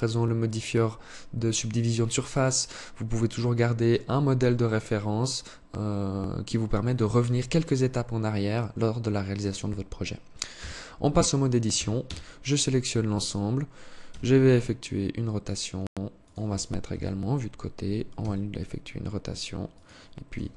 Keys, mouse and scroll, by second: 10.0 Tab, 11.2 a, 11.4 a, 13.6 r, 16.2 KP_3, 17.5 r, 19.7 g.